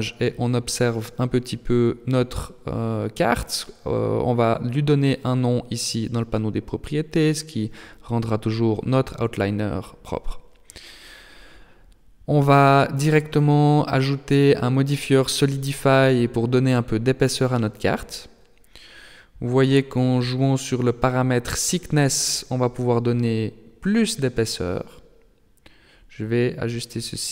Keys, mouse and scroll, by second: 2.6 click, 11.0 n, 13.7 click, 15.5 click, 20.4 middle click, 21.7-22.2 scroll up 3, 22.2 middle click, 23.3-23.6 scroll up 1, 24.5 click.